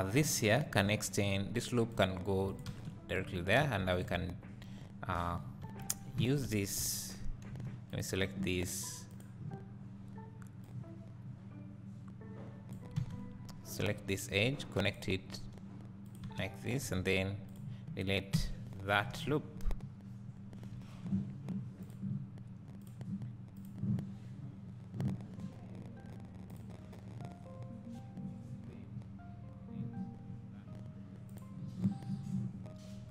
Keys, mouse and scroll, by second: 0.2 alt+a, 0.8 k, 2.8 space, 3.6 2, 3.9 click, 5.8 alt+1, 6.2 alt+a, 7.6 1, 7.9 click, 9.1 click, 10.7-12.7 drag, 13.0 alt+a, 13.8 k, 16.4 space, 16.9 2, 17.4 click, 19.2 ctrl+z, 20.8 2.